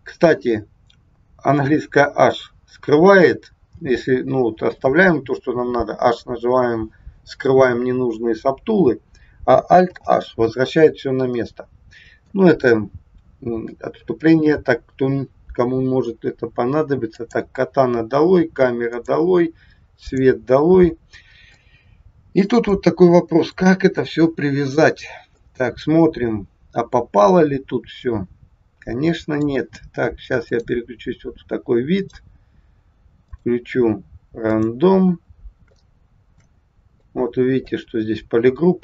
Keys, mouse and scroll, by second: 2.0 h, 10.0 alt+h, 17.1 click, 19.0 click, 20.1 click, 21.1 scroll up 1, 21.7 shift+middle click, 25.5 middle click, 30.6 click, 33.4 click, 35.2-35.6 scroll up 3, 35.7 shift+middle click, 37.0 middle click, 38.0-38.4 scroll down 4.